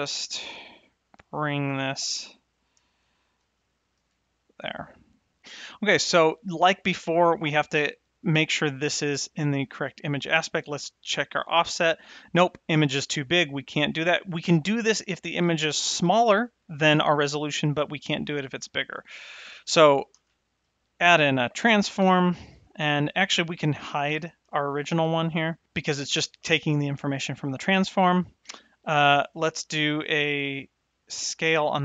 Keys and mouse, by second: 1.1 click, 1.8 shift+Right, 3.1 shift+s, 4.0 shift+Left, 18.8 click, 20.1 shift+a, 22.6 click, 24.1 h, 25.0 click.